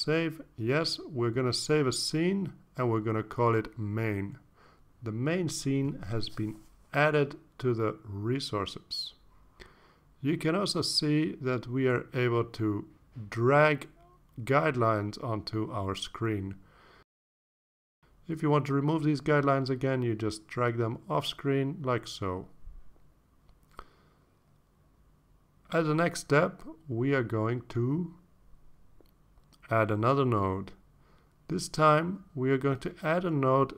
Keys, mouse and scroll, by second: 1.0 click, 2.8 click, 4.5-5.9 typing, 6.6 Return, 10.4-15.7 drag, 16.5-18.8 drag, 20.0 click, 21.9-23.0 drag, 24.2-25.2 drag, 26.9 click, 30.3-31.2 drag.